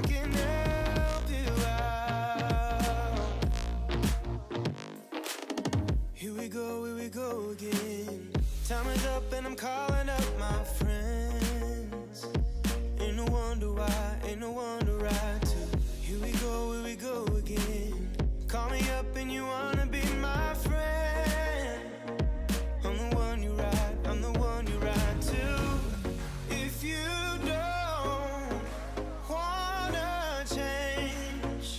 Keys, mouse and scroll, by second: 3.4-3.9 shift+middle drag, 3.9 click, 4.2 KP_1, 4.7 KP_3, 5.0-5.4 scroll up 3, 5.4 scroll down 3, 5.5-6.6 middle drag, 6.6 click, 7.0-7.9 middle drag, 7.9 KP_3, 8.1-8.4 scroll up 3, 8.4-9.0 shift+middle drag, 9.0-9.7 scroll up 1, 9.7 2, 9.9 alt+click, 10.5 scroll up 2, 11.0 ctrl+b, 14.7 middle click, 15.5 ctrl+b, 17.7 3, 18.3 x, 19.1 2, 19.6 alt+click, 20.2 f, 20.8 alt+click, 21.3 f, 21.6-22.1 scroll down 6, 22.1 middle click, 22.3 3, 22.5 click, 22.8 shift+click, 23.0 middle click, 23.6 shift+click, 23.8 shift+click, 24.1-25.3 middle drag, 25.3 scroll up 3, 25.5-27.0 middle drag.